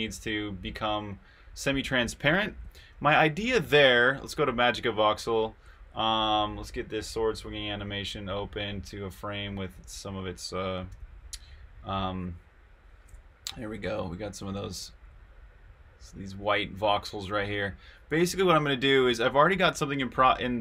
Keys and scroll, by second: 0.7-3.0 typing, 3.0 super+q, 3.6 super+Tab, 10.9 8, 13.2-14.3 s.